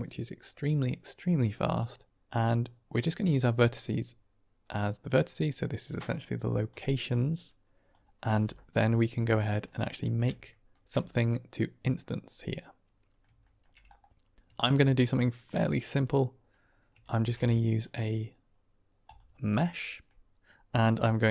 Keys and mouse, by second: 2.8-5.0 drag, 5.8 middle click, 6.4 drag, 7.0 click, 9.5 middle click, 9.9-10.6 shift+middle drag, 11.2-13.1 middle drag, 14.8 shift+click, 15.6-16.4 drag, 19.6-20.0 middle drag.